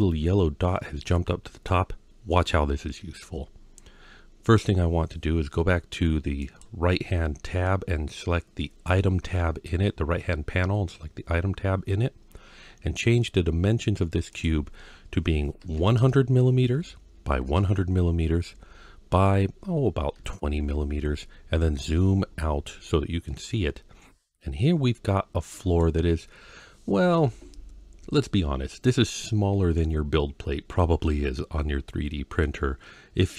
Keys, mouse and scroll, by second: 1.0-1.5 middle drag, 6.2 click, 14.1-20.4 drag, 15.8 KP_0, 17.4 KP_0, 21.4-22.3 scroll down 5, 23.1-25.6 middle drag, 28.8-32.2 middle drag.